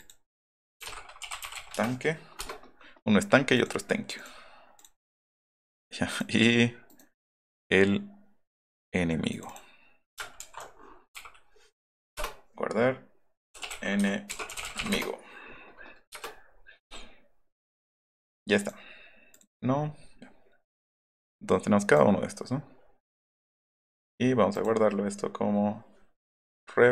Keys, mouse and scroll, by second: 0.0 click, 0.5-2.0 typing, 2.3 Return, 3.5 click, 4.1 click, 4.7 click, 5.7 right click, 6.0 right click, 6.8 right click, 7.4 click, 8.7 click, 9.3 click, 9.4 click, 11.2 e, 12.2 Return, 13.2-15.2 typing, 18.6 click, 19.3 drag, 21.1 click, 23.3 click, 23.8 click, 24.5 click.